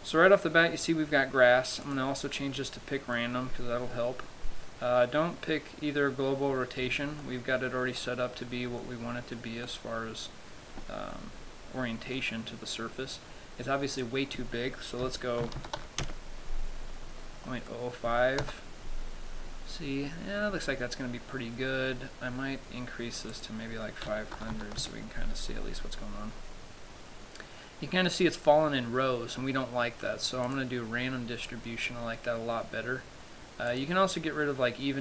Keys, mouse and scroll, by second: 0.1-0.8 scroll down 3, 0.5 middle click, 2.2 click, 3.4 middle click, 7.5 middle click, 8.3 middle click, 9.1 middle click, 9.9 middle click, 11.4 middle click, 12.4 middle click, 14.3 click, 17.2-18.0 scroll up 7, 18.0 middle click, 18.8 KP_0, 19.5-20.0 scroll up 2, 20.4-21.1 scroll down 6, 21.6-23.6 scroll up 15, 23.6 click, 23.6-25.0 scroll up 1, 26.5-27.0 scroll up 4, 27.0 scroll down 1, 30.8 click, 34.0 click.